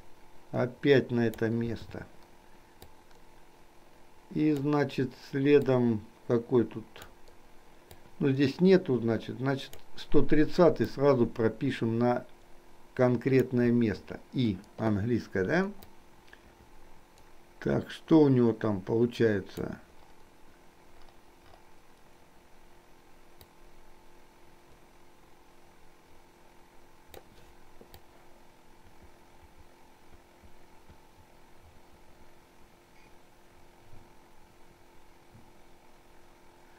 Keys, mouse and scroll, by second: 0.2-1.7 drag, 1.9 i, 2.9-4.8 drag, 5.8-7.2 drag, 8.0-9.9 drag, 11.2-13.5 drag, 13.8 i, 15.9-19.7 drag, 23.4-27.2 drag, 28.2-36.7 drag.